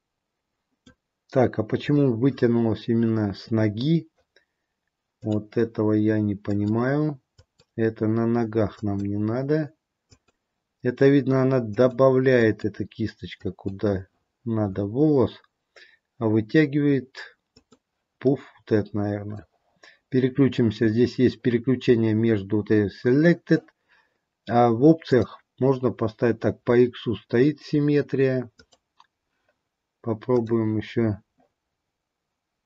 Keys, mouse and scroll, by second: 5.1 click, 6.7 click, 9.0 click, 10.3 click, 12.6 click, 13.6 click, 17.8 click, 18.4 middle click, 25.0 click, 30.5 click.